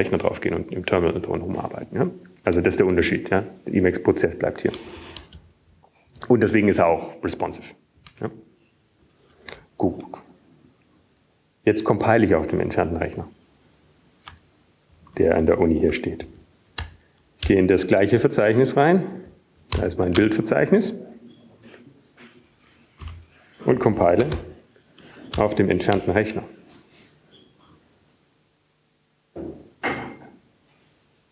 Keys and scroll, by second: 8.4 Down, 9.8 Up, 18.6 ctrl+x, 19.7 ctrl+f, 20.1 BackSpace, 21.2 Return, 21.2 BackSpace, 22.2 Up, 23.0-27.6 Up, 25.2 Return, 26.4 alt+x, 27.3-28.1 typing, 29.0 Return.